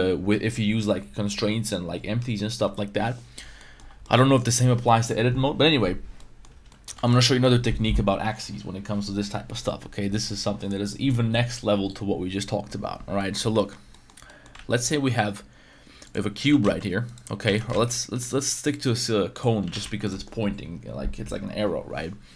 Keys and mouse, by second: 3.6 middle click, 4.0 middle click, 6.2 middle drag, 6.6 Tab, 6.7 middle click, 6.9 x, 7.2 middle click, 13.2 middle click, 13.5 shift+middle drag, 13.9 middle drag, 14.2 middle drag, 14.5 shift+a, 16.4 g, 16.6 z, 17.4 x, 17.7 shift+a, 19.6 g, 19.8 z.